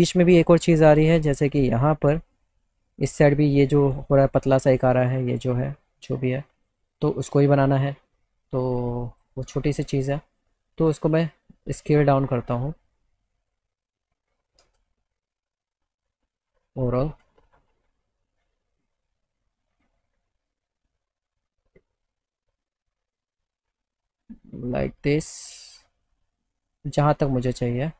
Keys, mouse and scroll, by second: 2.0 click, 9.2 click, 11.2-14.4 drag, 14.7 ctrl+z, 15.7 click, 18.6 alt+middle click, 20.0-22.8 shift+right drag, 22.8 shift+click, 25.2-27.0 shift+drag.